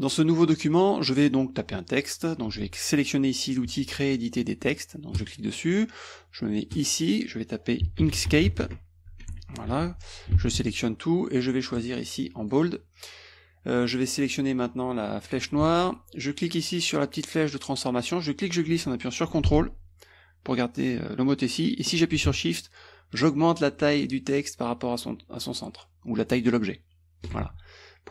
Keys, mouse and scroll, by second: 5.2 click, 6.8 click, 7.8-10.2 typing, 10.4 ctrl+a, 11.8 click, 12.4 click, 15.3 click, 18.0-27.4 drag.